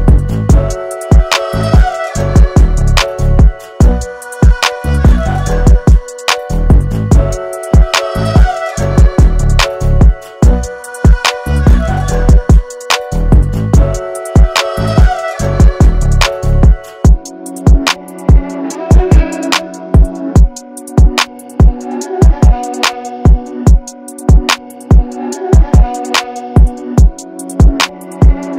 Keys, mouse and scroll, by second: 4.7-8.7 ctrl+drag, 8.7 ctrl+shift+], 9.9 click, 12.4 click, 16.8-27.4 drag, 27.4-28.5 drag.